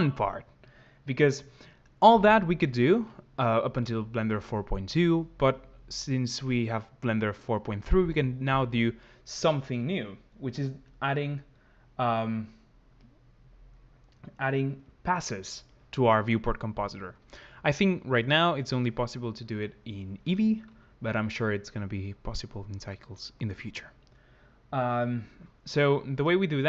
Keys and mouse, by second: 14.3 click.